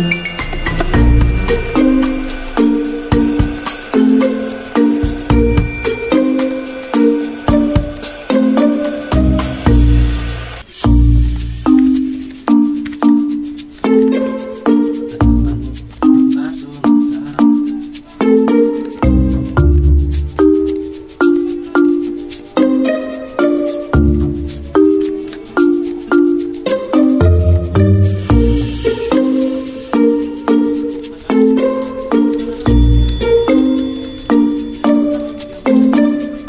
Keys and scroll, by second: 0.5 ctrl+z, 1.0 ctrl+2, 16.5-18.6 typing, 17.4 ctrl+a, 18.9 alt+Up, 19.0 alt+Up, 30.0 alt+Up.